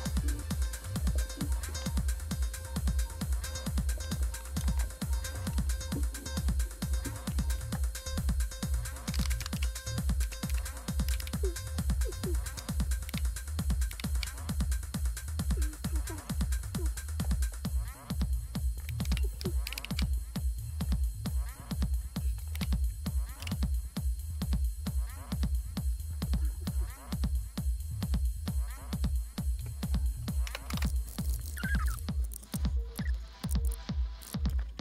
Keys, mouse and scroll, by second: 0.7-1.4 typing, 7.2-9.9 typing, 8.2 click, 10.2 Up, 10.5 Up, 11.0 Down, 11.2 Down, 13.0 super+Right, 13.8 super+Right, 16.6-18.2 drag, 19.0 ctrl+c, 19.6 super+Left, 19.8 super+Left, 21.3 right click, 21.9 click, 22.5 Right, 23.4 Return, 30.1-32.3 typing, 32.5 super+q, 32.9 Return, 33.3 click, 33.5 super+q, 33.6 Right, 33.7 Left, 33.9-34.7 typing, 34.0 click.